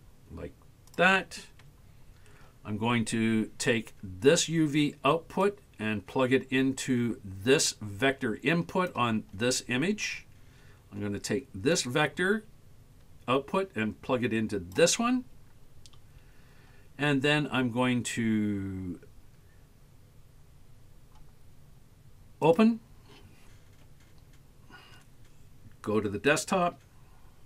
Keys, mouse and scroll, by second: 5.4-9.0 drag, 11.8-14.8 drag, 15.8-20.2 scroll up 5, 22.5 click.